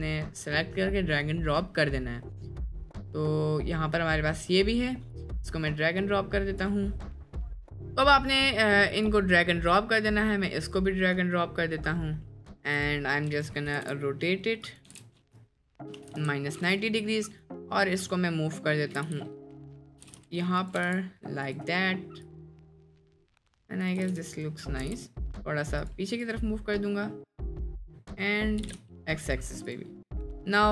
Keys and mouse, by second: 12.2 middle click, 12.8 click, 13.7 r, 14.9 r, 17.5-17.9 drag, 19.0 g, 20.0 g, 20.8 g, 22.2 click, 23.2-24.0 drag, 24.0 g, 24.8 g, 26.2 click, 26.9-27.3 middle drag, 27.8 click, 28.0 middle click, 28.6 g, 29.7 drag, 30.1 middle click.